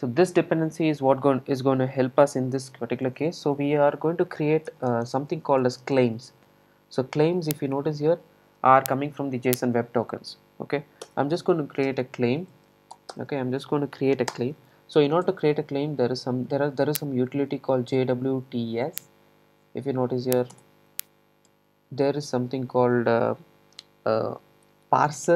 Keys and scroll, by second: 3.2 super+e, 11.2 Return, 20.6 Return.